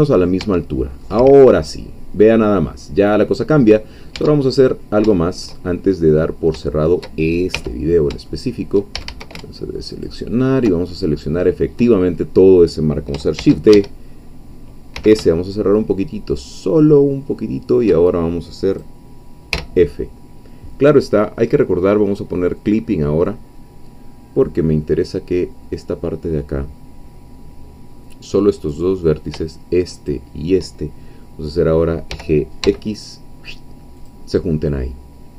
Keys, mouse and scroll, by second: 0.7 Tab, 0.7 scroll down 1, 1.0 middle click, 1.1-3.7 drag, 3.7-4.1 scroll up 2, 4.1 Tab, 4.5 middle click, 5.2-6.2 shift+middle drag, 6.2-6.7 shift+scroll up 4, 6.7 shift+middle click, 7.5 1, 8.3 shift+middle click, 8.9 shift+a, 9.9 alt+shift+click, 10.9-12.3 alt+shift+middle drag, 13.4 shift+d, 13.7 Escape, 15.0 s, 18.7 click, 19.5 f, 22.6 click, 28.7 click, 29.9 shift+click, 32.1 g, 34.0 click.